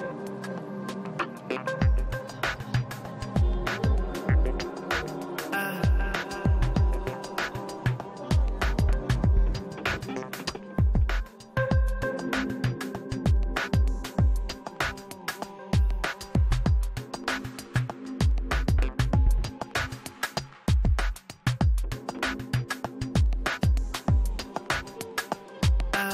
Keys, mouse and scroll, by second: 6.1 f, 6.8-10.6 drag, 6.8 f, 10.6 middle click, 10.9 i, 11.1 f, 11.6-16.7 drag, 12.0 f, 13.7 f, 14.2-16.5 middle drag, 16.7 middle click, 16.9 f, 17.0 click, 18.0-20.8 middle drag, 18.6 click, 20.3 i, 20.5 f, 20.8 f, 21.0 f, 21.3 click, 22.1 f, 22.3-26.1 drag, 22.9-23.9 middle drag.